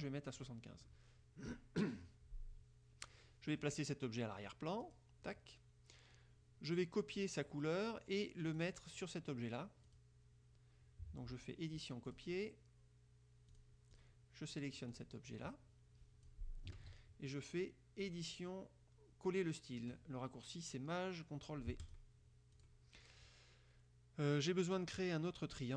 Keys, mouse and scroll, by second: 0.5 click, 5.0 click, 8.6 click, 10.0 click, 12.2 click, 13.6 click, 14.0 click, 15.0 click, 15.4-16.6 drag, 16.9 ctrl+z, 18.1 click, 21.9 click, 22.6 click.